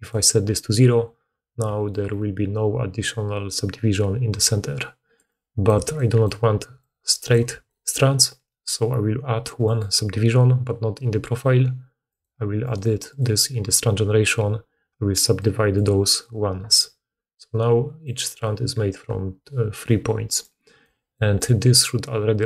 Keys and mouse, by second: 1.5 d, 5.0-7.3 typing, 7.5 click, 7.5 middle click, 7.5 right click, 7.7 click, 7.7 middle click, 7.7 right click, 17.1-22.4 drag, 17.1-22.4 middle drag, 17.1-22.4 right drag, 17.4-17.9 d, 20.2 d, 20.3 d.